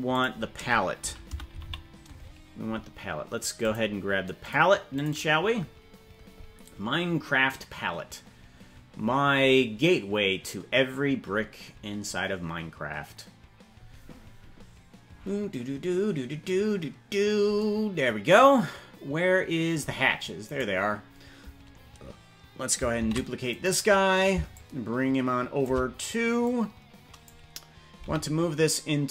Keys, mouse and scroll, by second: 20.6 right click, 23.2 shift+d, 24.5-25.8 shift+drag, 26.4 click, 28.2 m.